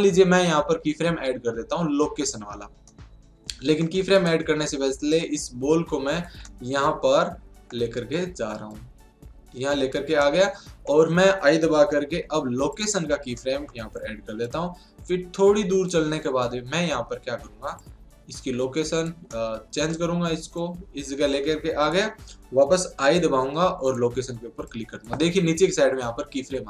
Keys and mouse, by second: 2.9-4.0 middle drag, 4.1-5.9 right drag, 5.1-6.6 drag, 6.6-8.7 middle drag, 8.7-10.5 drag, 10.2-12.0 middle drag, 12.0 i, 13.4-14.5 middle drag, 14.5-16.2 drag, 17.8-19.3 drag, 19.3 middle click, 20.6-22.3 drag, 22.9 i, 24.7-26.4 drag.